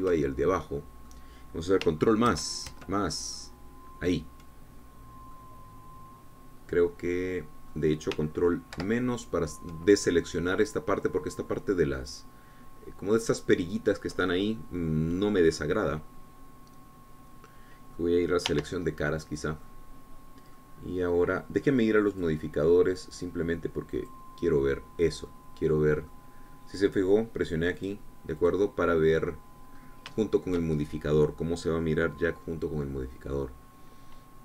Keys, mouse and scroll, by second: 1.2 shift+click, 1.5 shift+scroll down 1, 1.8-3.1 shift+drag, 3.6 ctrl+KP_Add, 6.7-9.2 drag, 10.1 ctrl+KP_Subtract, 14.9 click, 16.7-19.4 drag, 19.8 3, 20.2-21.4 middle drag, 21.4 scroll up 2, 21.9 middle click, 23.4 click, 25.3 click, 25.9-28.1 middle drag, 29.1 click, 29.7 click, 31.1 scroll up 2, 31.5 shift+middle click, 32.1 shift+middle click.